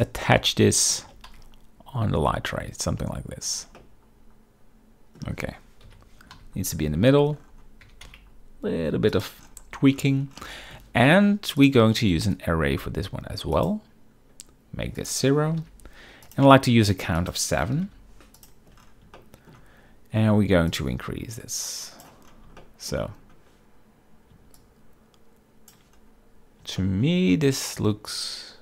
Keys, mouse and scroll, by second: 0.5-1.0 middle drag, 1.2 g, 3.9-5.3 middle drag, 6.0 KP_7, 6.4 z, 7.9 g, 8.2 x, 9.2 shift+click, 11.7-13.8 drag, 15.1-16.4 drag, 17.3-18.5 drag, 19.3-19.6 shift+middle drag, 20.8-22.3 drag, 22.7-23.0 shift+middle drag, 24.7-25.8 shift+drag, 26.9 shift+middle drag, 28.2-28.6 shift+drag.